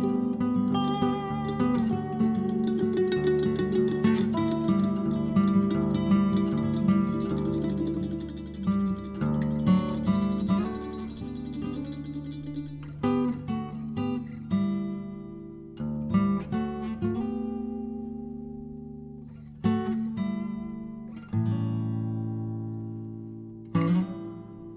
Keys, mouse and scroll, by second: 0.9 middle click, 1.6-3.2 drag, 3.6 p, 4.7 l, 8.5 middle click, 8.8-9.1 scroll up 1, 9.1-12.1 middle drag, 12.6-14.2 middle drag, 14.5 click, 16.6 shift+click, 18.1 click, 19.4 click, 22.4 click.